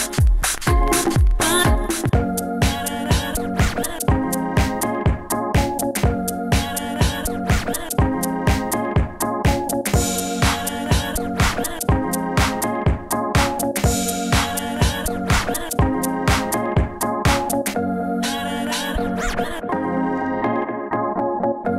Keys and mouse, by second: 0.8 ctrl+e, 3.2 middle click, 3.8 click, 3.8 g, 4.7 click, 4.9 g, 5.5 click, 6.3 click, 7.2 click, 7.4 g, 7.9 g, 8.9 middle click, 10.8 middle click, 11.3 shift+right click, 12.3 ctrl+e, 13.0 Tab, 15.1 Tab, 17.3 Tab, 18.2 middle drag, 18.8 Tab, 19.8 ctrl+e, 20.1 Tab, 20.7 Tab, 21.1 ctrl+e.